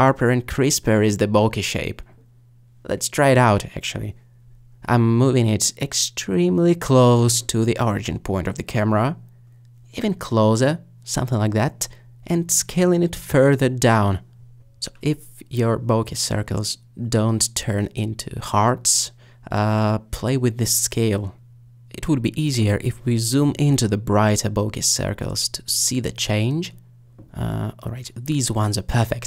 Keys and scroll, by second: 1.3 alt+d, 2.9 ctrl+z, 4.3 g, 4.8 z, 8.6 alt+g, 8.7 alt+z, 11.2 alt+g, 15.0 alt+s.